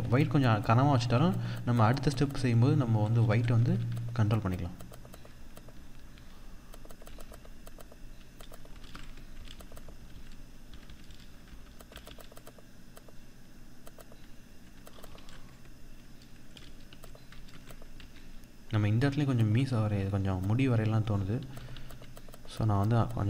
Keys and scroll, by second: 6.5 ctrl+-, 8.2 ctrl+=, 14.7 ctrl+-, 16.7 ctrl+=, 16.9 ctrl+space, 17.4 ctrl+=, 21.4 ctrl+=.